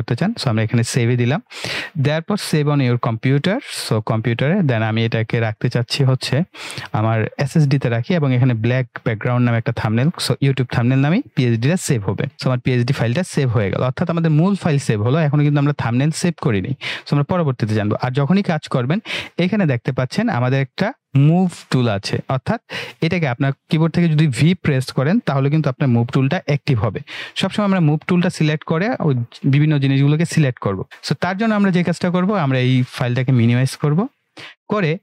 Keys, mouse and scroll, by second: 0.2 click, 3.0 click, 7.4 click, 26.5 v, 33.6-35.0 drag.